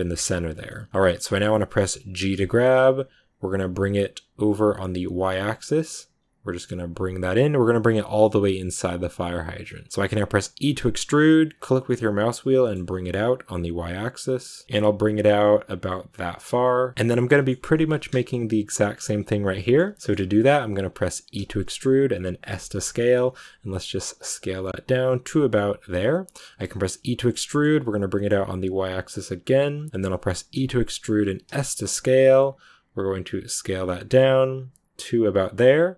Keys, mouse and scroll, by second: 0.5 scroll up 1, 0.6-2.2 middle drag, 2.2 g, 9.9 middle click, 10.5 e, 16.9 scroll up 1, 17.2-20.0 middle drag, 20.0-21.3 scroll up 1, 21.3 e.